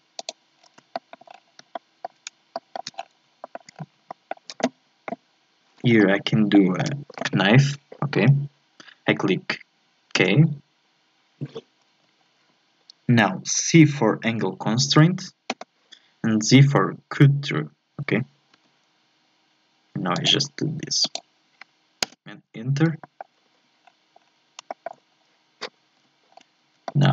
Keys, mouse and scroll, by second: 0.4 click, 0.6-0.9 scroll down 1, 0.9 shift+middle click, 1.3 scroll up 2, 1.7-2.9 shift+middle drag, 2.9 scroll up 2, 3.5 shift+middle click, 3.7 scroll up 5, 4.1-5.9 shift+middle drag, 5.9-6.3 scroll down 1, 6.3 shift+scroll up 1, 6.5-9.5 shift+middle drag, 10.3 k, 23.0 shift+middle click, 23.8-24.7 scroll down 5, 24.7-26.0 shift+middle drag, 26.0 z, 26.3 scroll up 4, 26.9 shift+middle click.